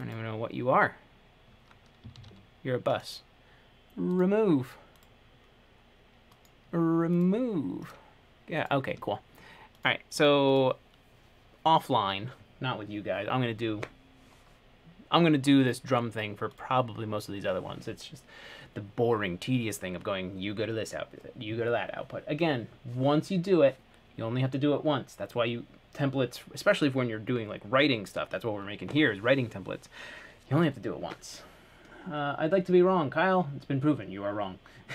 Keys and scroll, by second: 2.3 t.